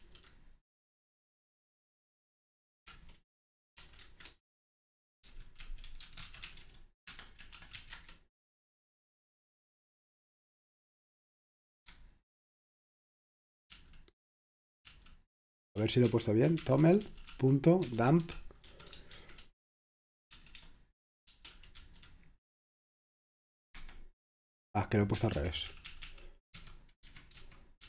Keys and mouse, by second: 0.0 Up, 2.9 Return, 4.1-8.3 typing, 12.0-13.9 typing, 14.9-22.3 typing, 23.9 Escape, 25.0-27.8 typing.